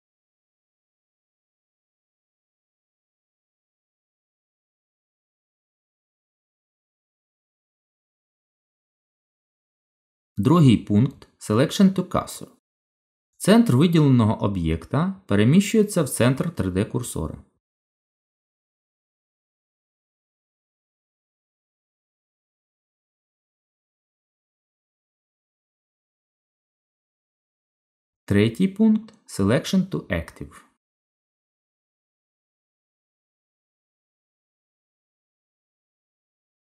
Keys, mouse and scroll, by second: 0.9 middle click, 6.0 middle click, 7.3 shift+middle click, 9.7 shift+s, 18.3 shift+a, 20.2 g, 21.9 click, 24.2 shift+click, 27.0 shift+s, 33.9 z, 35.8 middle click.